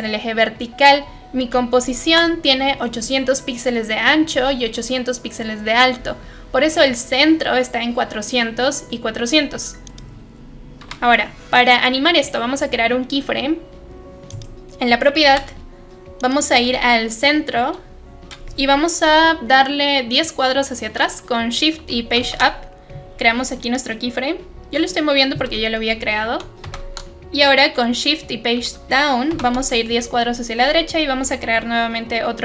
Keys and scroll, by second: 10.9 p, 15.3 u, 22.1 shift+Page_Up, 26.6 shift+Page_Down, 29.2 shift+Page_Down.